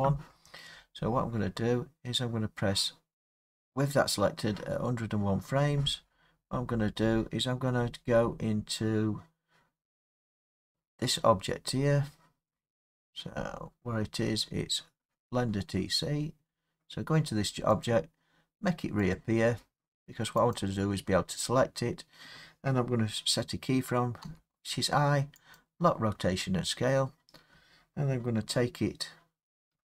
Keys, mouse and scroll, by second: 3.2 click, 5.0 scroll, 6.4-7.8 scroll, 7.8-9.6 scroll, 13.4 middle click, 13.6 middle click, 17.9 click, 19.2 click, 20.6 click, 24.3 i, 25.6 click, 29.7-29.8 Right.